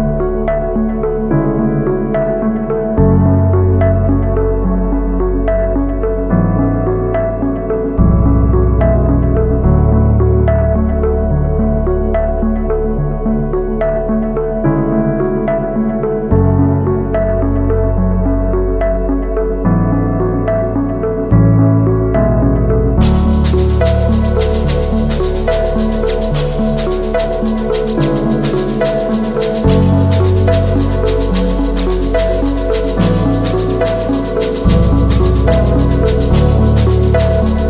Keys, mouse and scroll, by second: 20.9 shift+click, 24.3 right click, 31.4 double click.